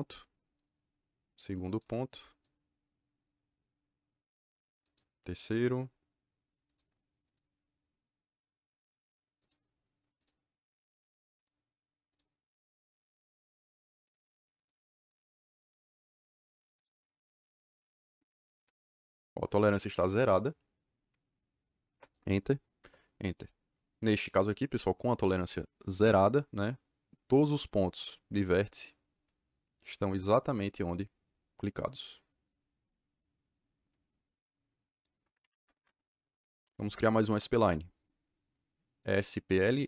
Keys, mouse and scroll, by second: 0.5 click, 1.6 click, 4.8 click, 5.6 click, 6.6 click, 7.2 click, 9.3 click, 10.1 click, 11.3 click, 12.1-13.5 drag, 14.0 click, 14.5 click, 14.9 click, 15.5 click, 16.7 click, 18.5 l, 21.8 Return, 22.8 Return, 27.4 click, 35.4 Escape, 36.3-37.2 typing, 37.2 Return.